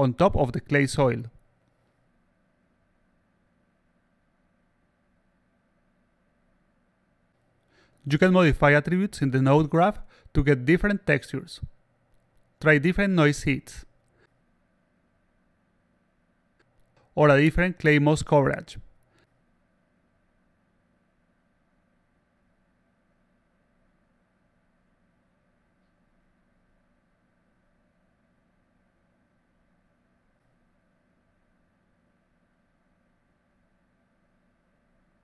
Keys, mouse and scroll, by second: 2.6-3.2 alt+drag, 5.1 click, 5.2 click, 8.1-9.6 drag, 10.6 click, 11.8 click, 13.1 click, 16.8 click, 17.9 click, 19.6 click, 21.1 click, 22.8 click, 24.1 click, 26.0 click, 27.0 click, 28.7 click, 29.7 click, 32.9 click.